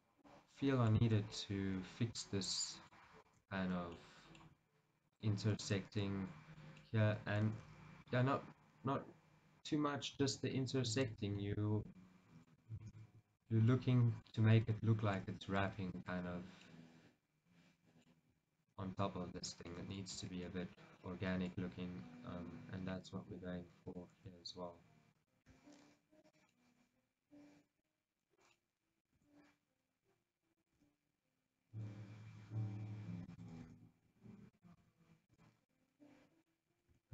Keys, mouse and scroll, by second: 0.1 shift+click, 0.4-5.3 middle drag, 1.1 shift+z, 3.3 shift+z, 5.3 shift+click, 6.2-11.0 middle drag, 7.8 ctrl+z, 10.1-11.0 scroll up 1, 11.0 shift+click, 11.6-13.6 shift+middle drag, 13.2 ctrl+z, 13.6 shift+click, 13.8-15.3 middle drag, 16.1 shift+click, 16.8-18.8 middle drag, 18.8 shift+click, 19.4 shift+click, 19.9 middle click, 20.3 shift+z, 21.9 g, 24.1 click, 24.4 r, 25.4 click, 25.6 g, 26.5 click, 26.6-29.3 middle drag, 29.3-30.9 right drag, 29.3 r, 30.9 g, 33.5 click, 33.7 r, 34.8 click, 34.9 g, 35.6 click, 35.8-37.1 middle drag.